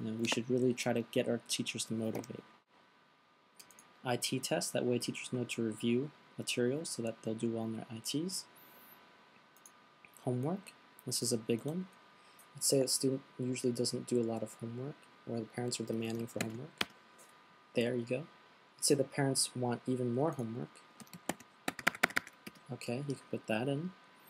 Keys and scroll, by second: 16.6 shift+h, 21.5 shift+h, 22.1 shift+h, 23.4 typing.